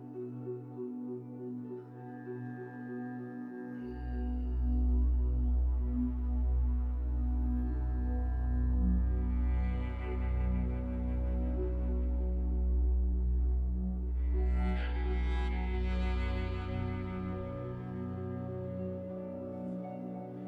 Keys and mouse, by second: 0.6 click, 1.1 click, 1.4 Tab, 3.2 click, 3.9 Tab, 4.6 Tab, 5.7-6.7 middle drag, 7.3 Tab, 7.8 Tab, 9.7 click, 10.7 middle click, 11.8 Tab, 12.3 Tab, 12.7-13.5 middle drag, 13.9 F4, 14.4-15.8 middle drag, 17.2 click, 17.5 click, 18.7-19.3 middle drag, 19.5-20.4 right drag.